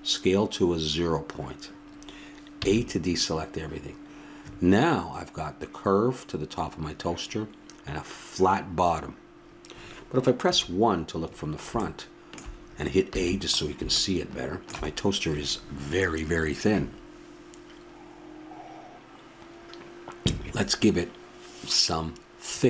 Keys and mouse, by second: 2.6 a, 3.7-10.1 middle drag, 10.4 KP_1, 13.1 a, 16.6-22.6 middle drag.